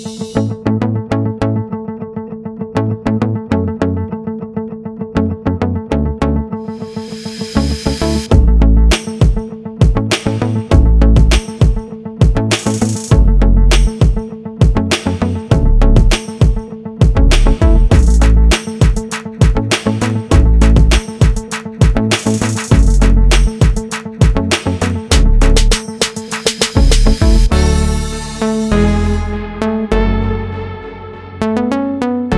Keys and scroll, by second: 13.6 ctrl+0.